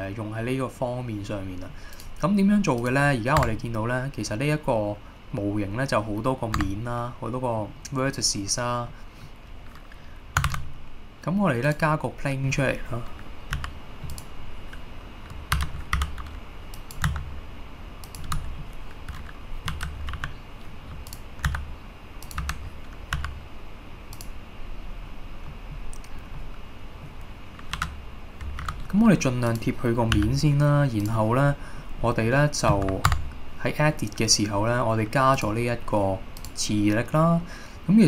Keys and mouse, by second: 2.1-3.6 drag, 3.6 Tab, 6.8 Tab, 7.7-8.3 middle drag, 9.0 middle click, 10.6 shift+a, 12.4 middle drag, 14.2 click, 14.2 g, 15.7 KP_3, 16.1 r, 16.8 click, 17.2 s, 18.1 click, 18.4 middle drag, 19.8 KP_3, 20.2 g, 21.2 click, 21.6 s, 22.3 click, 22.5 KP_1, 23.3 g, 24.2 click, 25.6 middle click, 26.5-27.1 middle drag, 27.9 KP_3, 28.7 r, 29.6 click, 30.3 g, 31.1 click, 31.6-31.9 middle drag, 32.1 middle drag, 33.2 Tab, 35.4 click, 36.6-38.0 drag.